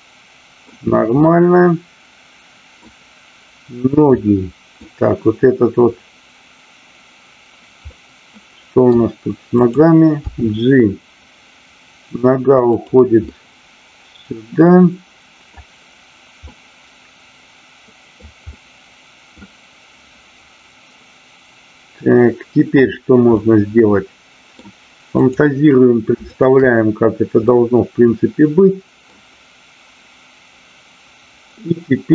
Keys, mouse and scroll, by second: 1.3-2.8 middle drag, 4.1-4.8 middle drag, 7.8-8.9 middle drag, 9.5 click, 12.8 drag, 13.2-15.5 middle drag, 16.4-18.0 middle drag, 18.5-19.4 middle drag, 23.3-24.6 middle drag, 25.2-25.7 drag, 26.3-27.2 shift+drag, 27.4-29.1 middle drag.